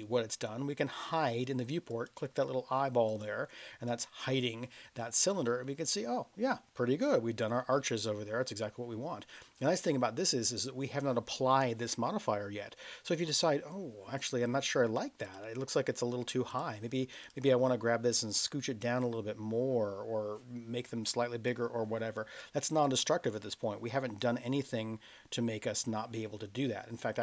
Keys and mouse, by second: 1.8 click, 3.1 click, 3.9 click, 5.4-9.3 middle drag, 17.2 click, 18.4 click, 22.8 click.